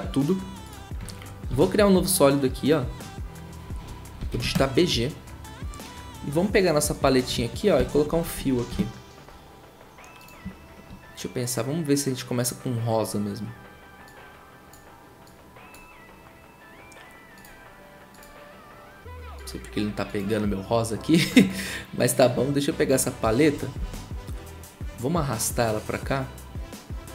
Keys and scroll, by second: 1.5 ctrl+a, 1.5 ctrl+y, 3.9-4.8 typing, 7.8-8.8 typing, 23.8 ctrl+w.